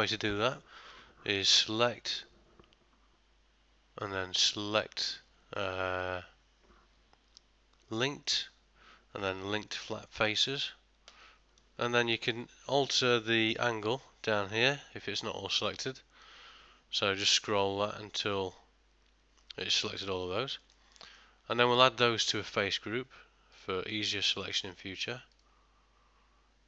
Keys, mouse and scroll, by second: 1.5 click, 14.4 click, 19.8 middle click, 20.7 ctrl+middle click, 21.0 middle click, 21.6 shift+middle click, 23.6 click.